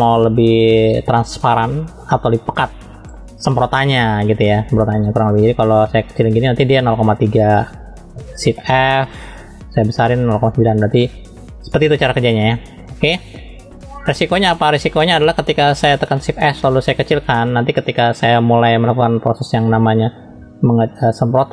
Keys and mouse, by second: 8.6 shift+f, 11.8 click, 16.2 shift+f, 20.3 f.